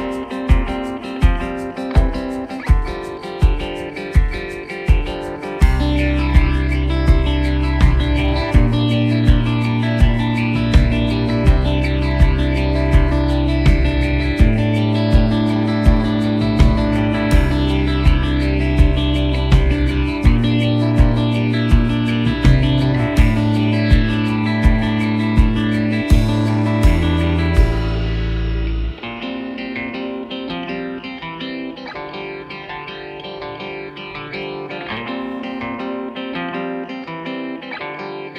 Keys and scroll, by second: 36.2 f, 36.5 Return.